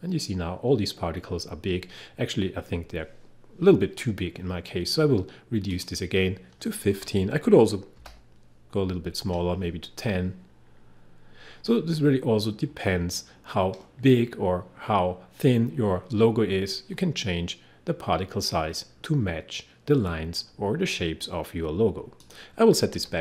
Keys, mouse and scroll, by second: 5.8 click, 7.0 1, 8.0 0, 22.3 click, 23.0-23.2 typing.